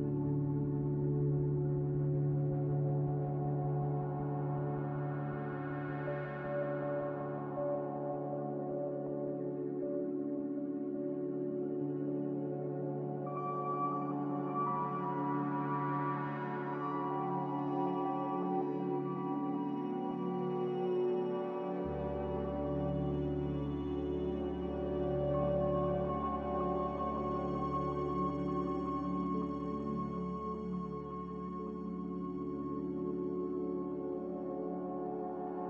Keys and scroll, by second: 0.0 a, 11.0-13.5 typing, 18.2 3, 20.6 2, 22.8 ).